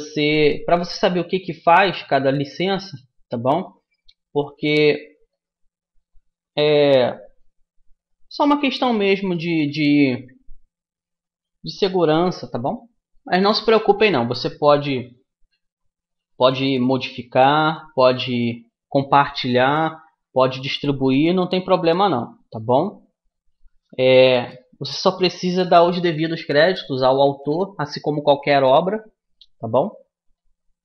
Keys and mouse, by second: 2.7-6.7 right drag, 6.7-8.7 middle drag, 8.7 right click, 8.8-10.1 middle drag, 29.3-30.8 middle drag.